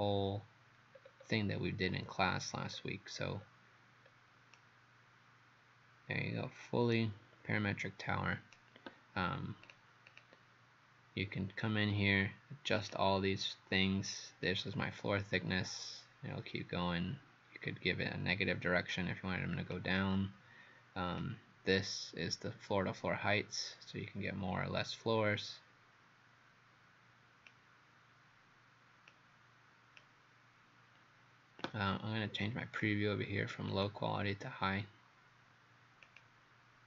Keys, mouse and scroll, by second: 1.0 scroll down 2, 1.9 scroll down 1, 2.8-3.4 scroll down 1, 3.4-4.1 scroll down 1, 4.1-4.6 scroll up 1, 4.6 right click, 9.7 click, 10.1 click, 12.8 click, 36.2 click.